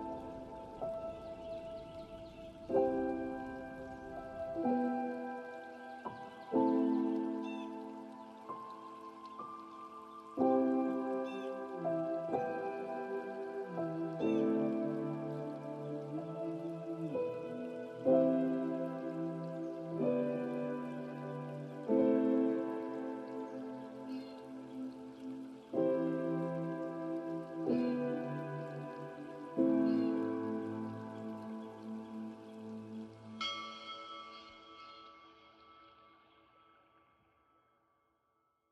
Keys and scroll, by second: 0.4 ctrl+space, 36.0 ctrl+space.